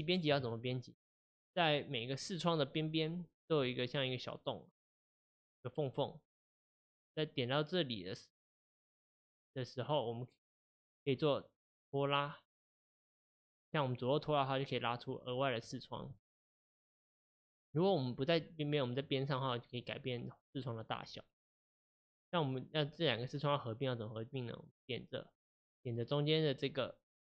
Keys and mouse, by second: 12.6-14.2 drag, 19.2-27.3 drag.